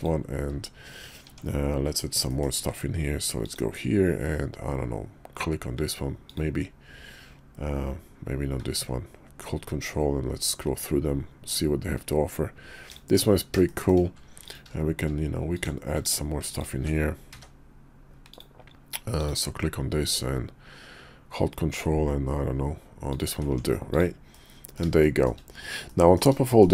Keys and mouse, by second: 1.2 Tab, 2.3 click, 2.7 d, 13.7 shift+click, 14.5 alt+click, 16.5 alt+shift+click, 17.3 d, 23.4 Tab, 23.9 click, 24.4-24.7 middle drag, 25.0-25.3 shift+middle drag, 25.9 middle click, 26.5 shift+middle click.